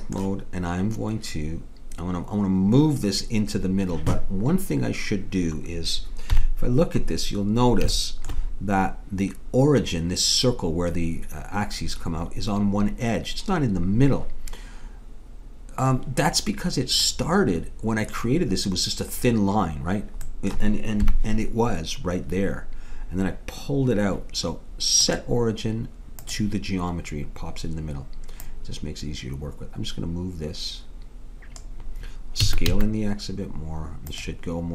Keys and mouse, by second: 6.4 KP_1, 17.1 middle click, 20.3 middle click, 21.0 KP_1, 25.0-26.8 drag, 28.5 click, 32.4 s.